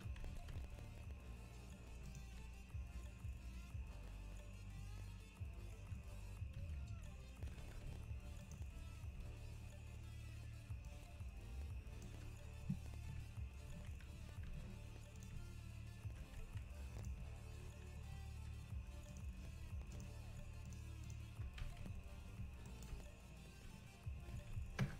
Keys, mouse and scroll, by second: 0.0 Tab, 7.7 Tab, 8.4 click, 10.9-12.3 drag, 13.1 Tab, 13.1 KP_Divide, 13.4 KP_Divide, 13.7 z, 14.5 Tab, 16.4 x, 19.1-20.8 drag, 21.1 shift+click, 21.6 s, 22.9 ., 24.4 s.